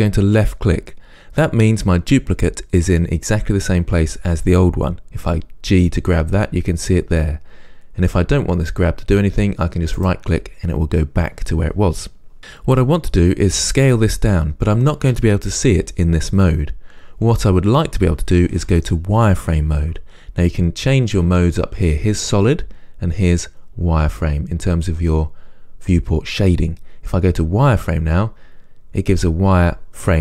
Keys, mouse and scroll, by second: 0.7 click, 5.5 g, 10.3 right click, 27.9 click.